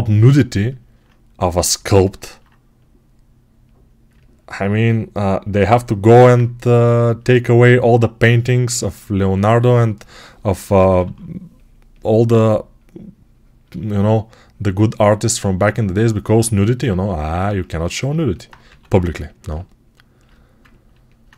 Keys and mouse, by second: 6.2-15.4 right drag, 10.5 p, 10.7 [, 10.9 [, 15.4-19.3 drag, 18.5 x, 19.3-21.3 ctrl+right drag.